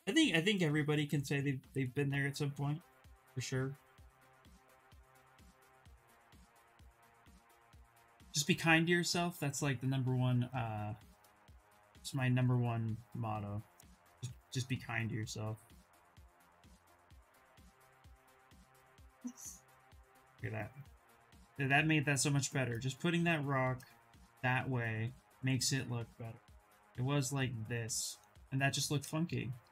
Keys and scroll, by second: 1.1 ctrl+z, 1.4 ctrl+z, 1.8 ctrl+z, 2.3 ctrl+z, 2.6 ctrl+z, 3.0 ctrl+z, 20.0 q, 26.1 ctrl+z, 26.5 ctrl+z, 27.0 ctrl+z, 28.8 ctrl+shift+z, 29.0 ctrl+shift+z.